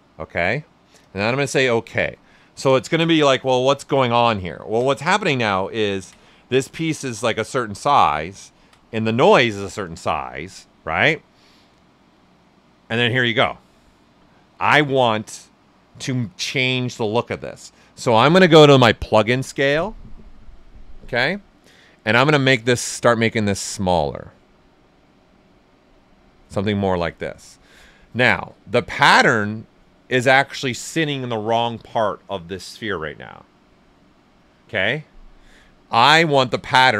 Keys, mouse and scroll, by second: 1.5 click, 4.7 ctrl+alt+right click, 5.0 right click, 5.6 ctrl+right click, 6.0-12.8 ctrl+alt+right drag, 22.7-28.8 drag, 28.8-32.7 right drag, 36.7-36.9 ctrl+alt+right drag.